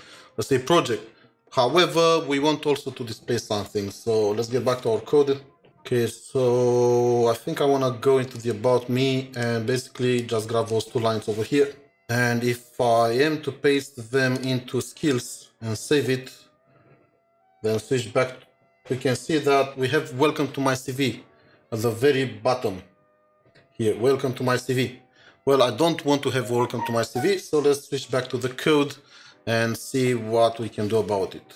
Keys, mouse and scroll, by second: 4.7 ctrl+shift+7, 7.3 scroll up 2, 12.0 typing, 15.0-15.4 typing, 15.1 double click, 17.7 ctrl+shift+7.